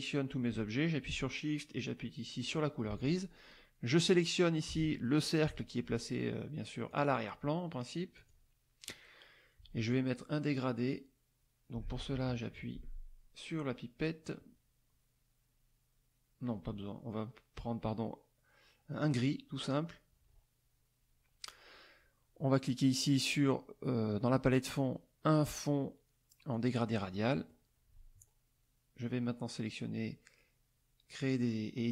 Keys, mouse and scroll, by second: 2.4 shift+click, 2.9 shift+click, 4.0 click, 6.9 click, 8.1 click, 19.0 click, 26.5 click, 27.1 middle click.